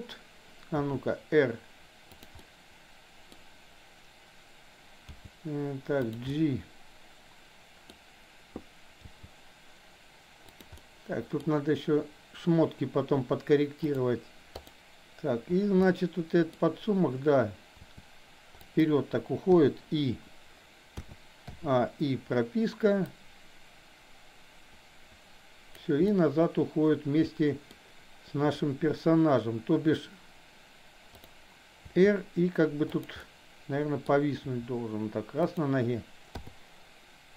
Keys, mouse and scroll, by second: 0.8 r, 2.3-3.3 middle drag, 5.1 g, 6.3-8.0 middle drag, 9.1 g, 10.7 middle click, 13.8 click, 14.5 click, 15.8-16.5 middle drag, 17.7 r, 19.6 i, 21.0 a, 21.6 i, 23.1-25.8 drag, 26.1-27.6 middle drag, 31.8 r, 33.1-34.1 middle drag, 34.5 r, 36.3 i.